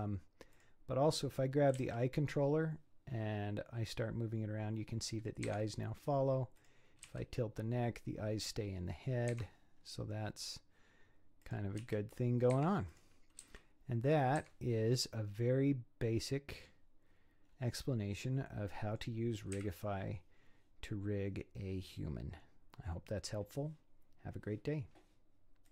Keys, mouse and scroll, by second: 0.5 click, 1.0 scroll up 5, 1.7 g, 5.6 scroll down 6, 6.6 click, 7.1 r, 9.7 scroll down 5, 10.4 scroll up 3, 11.4 click, 11.8 r, 12.9 click, 13.4 r, 14.7-15.4 scroll down 6, 15.4-17.4 middle drag, 17.4-18.7 scroll up 4, 18.7 middle click, 19.5 KP_1, 20.3-22.5 scroll down 4.